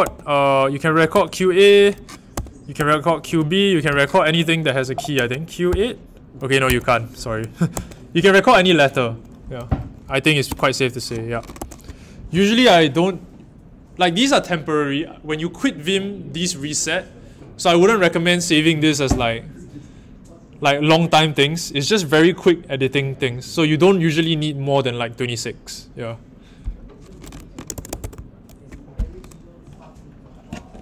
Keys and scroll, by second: 0.0 a, 2.3-3.2 typing, 3.9 Escape, 5.1-6.1 typing, 6.6 Escape, 7.7 q, 10.5 p, 11.5 q, 27.5-28.3 typing.